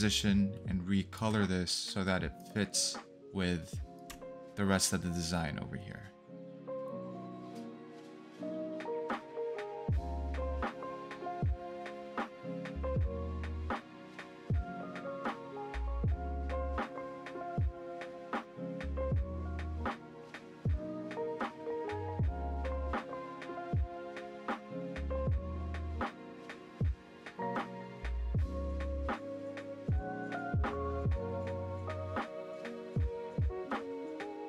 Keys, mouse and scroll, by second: 7.9 i, 11.1 v, 14.7 double click, 16.0 ctrl+c, 23.7 ctrl+c, 28.9-29.5 scroll up 1, 28.9 i, 29.6 ctrl+v, 32.5 ctrl+z, 33.1 click.